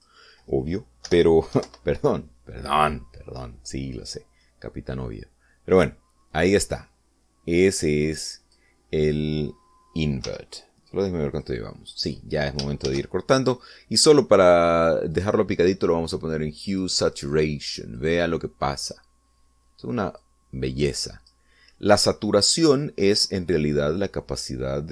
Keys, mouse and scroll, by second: 0.8 click, 1.9 BackSpace, 2.4 5, 2.5 Return, 5.9 click, 7.5-9.6 drag, 9.9 click, 11.1 x, 12.3 click, 12.9 click, 13.7 shift+a, 16.0 click, 17.6 click, 18.9-20.0 drag, 21.1-22.4 drag.